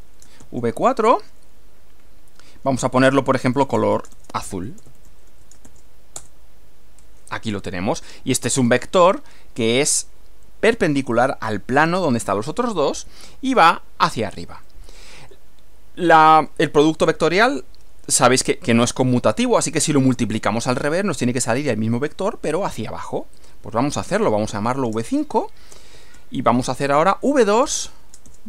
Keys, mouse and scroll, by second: 0.0-0.4 typing, 2.8-6.1 typing, 6.2 shift+Return, 8.1 middle click, 9.8 click, 12.6 middle click, 14.6 middle click, 16.1 click, 17.0 Return, 23.4 click, 24.2-28.4 typing.